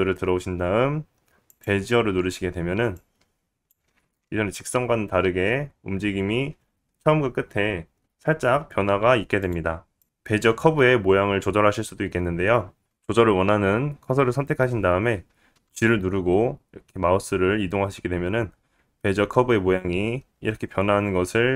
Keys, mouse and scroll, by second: 4.2 click, 5.3 space, 10.0-21.5 right drag, 10.0 click, 16.8 g.